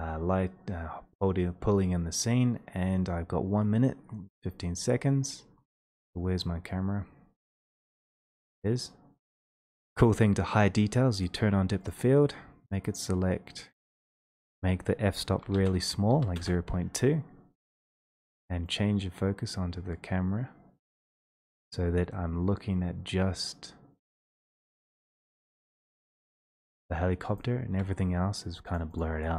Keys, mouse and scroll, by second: 2.8-8.5 scroll, 8.6 click, 9.8 click, 11.3 click, 11.9 click, 14.6 click, 15.4-16.1 typing, 27.3 shift+click, 28.8 click.